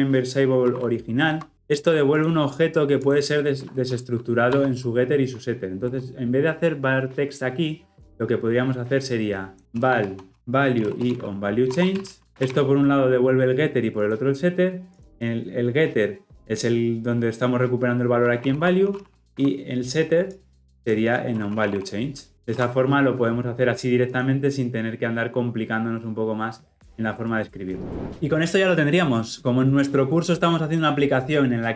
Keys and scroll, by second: 19.3 Escape, 22.3 ctrl+alt+l, 22.4 ctrl+alt+o.